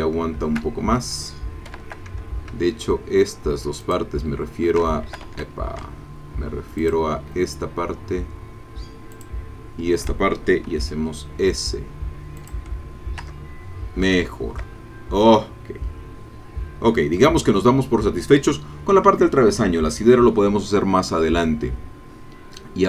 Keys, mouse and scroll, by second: 0.0 shift+click, 1.7 a, 3.8 alt+shift+click, 5.1 alt+shift+a, 6.8 alt+shift+click, 9.1 alt+shift+click, 10.7 s, 12.4 click, 12.8-13.1 scroll down 1, 13.3 Tab, 13.7 scroll down 1, 14.1 shift+middle click, 14.8-15.2 shift+scroll down 3, 15.4-17.7 middle drag, 20.2-22.0 middle drag.